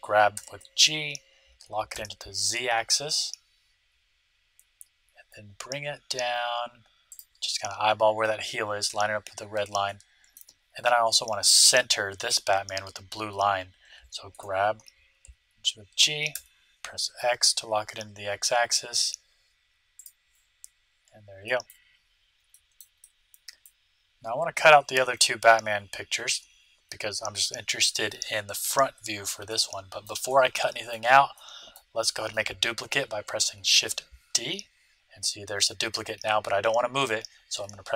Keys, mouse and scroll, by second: 0.3 g, 9.8-12.4 middle drag, 14.3 g, 20.7-21.4 scroll up 1, 21.4-24.8 middle drag, 29.5-33.0 middle drag, 33.2 middle click, 33.3 shift+d.